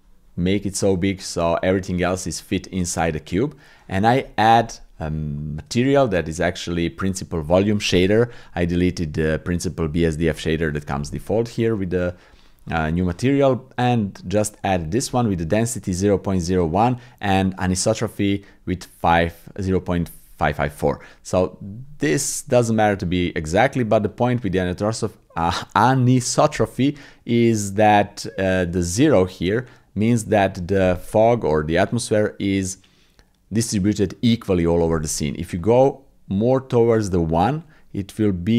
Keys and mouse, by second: 1.9 click, 3.0 click, 5.4 shift+click, 6.2 shift+click, 15.2 shift+click, 21.5-23.6 drag, 24.1-30.2 drag, 35.6-38.5 drag.